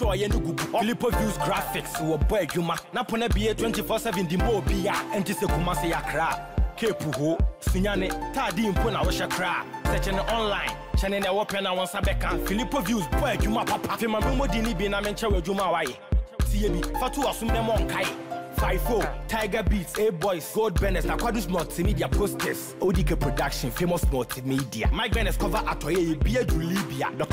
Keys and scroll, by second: 7.6 ctrl+a.